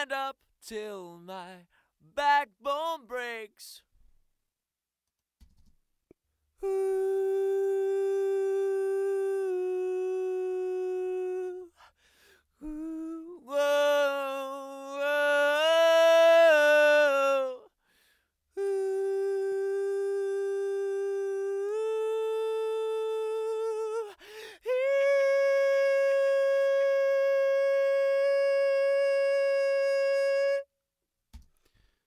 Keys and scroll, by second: 5.4 space, 31.3 space.